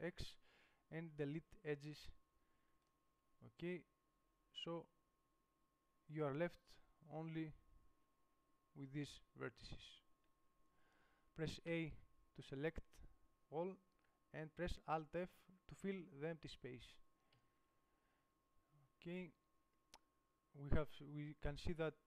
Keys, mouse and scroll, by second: 0.2 x, 2.1 middle click, 12.0 a, 17.6 alt+f.